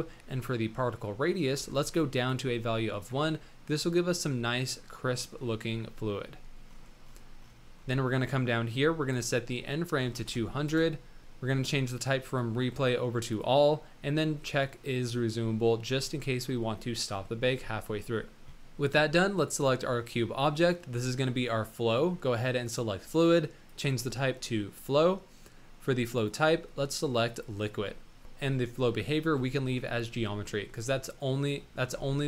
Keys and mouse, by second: 9.1-11.2 drag, 10.3 KP_0, 12.2-13.7 drag, 14.9-18.0 drag, 19.3 click, 20.0 middle click, 22.7 click, 23.7-25.0 drag, 26.2-27.5 drag, 29.6 shift+middle drag, 30.1 middle drag.